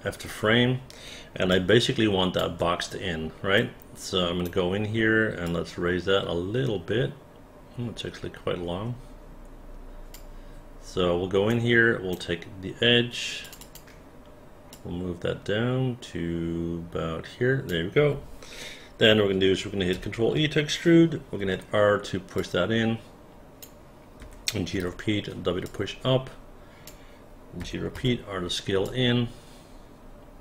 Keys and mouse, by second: 1.5 alt+click, 3.6 right click, 5.4-10.1 drag, 11.5 right click, 13.4 click, 13.6 click, 14.7-17.7 drag, 19.9 ctrl+e, 21.5 r, 22.4-23.6 drag, 24.2 g, 24.7 w, 25.6-26.8 drag, 27.6 g, 27.9 r, 28.8-30.4 drag.